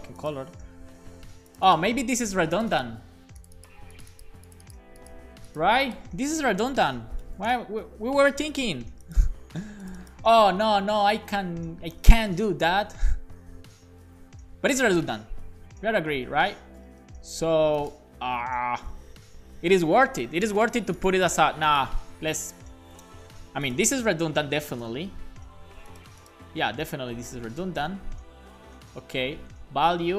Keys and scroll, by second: 6.9 shift+super+Left, 7.2 BackSpace, 7.5 super+s, 13.3 super+z, 15.1 super+z, 24.2 shift+super+Left, 24.6 BackSpace, 25.1 super+s, 26.8 shift+super+Left, 27.1 BackSpace, 27.7 super+s, 28.6 BackSpace, 28.8 super+s.